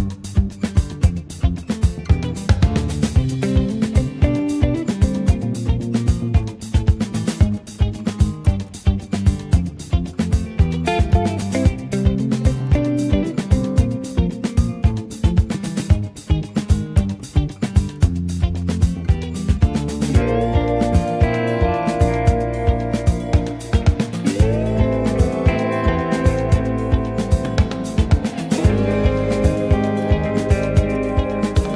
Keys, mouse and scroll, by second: 2.3 ctrl+z, 2.6 click, 3.0 alt+middle click, 3.8-4.2 scroll down 1, 4.2 shift+a, 4.5 click, 4.8 click, 6.3 alt+middle click, 6.5 alt+middle click, 7.2 click, 8.4 ctrl+z, 8.8 click, 12.4 click, 12.7-13.0 scroll up 2, 13.0 middle click, 13.6 shift+a, 17.0 alt+shift+middle click, 17.7 s, 18.8 click, 19.8 r, 22.7 scroll down 2, 22.9 shift+middle click, 23.3 1, 23.6 click, 24.3 click, 24.8 Tab, 25.2 click, 26.8 click, 28.3 click, 29.5 click, 30.0 click, 31.2 click.